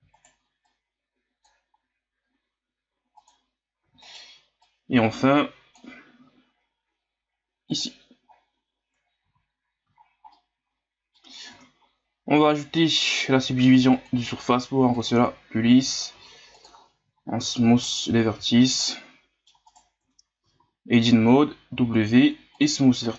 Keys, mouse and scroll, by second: 0.7-1.8 drag, 1.8 s, 3.8 e, 4.6-6.2 drag, 6.2 s, 8.3-9.2 scroll down 5, 9.2 z, 9.9-10.3 scroll up 1, 10.3 middle click, 11.3 scroll up 4, 11.5 Tab, 13.0-16.1 drag, 16.1 w, 17.9 click, 18.3 a, 18.6 scroll down 1, 18.8-19.7 middle drag, 19.7 right click, 20.0 Tab, 20.4 a, 20.6 a, 21.7 w.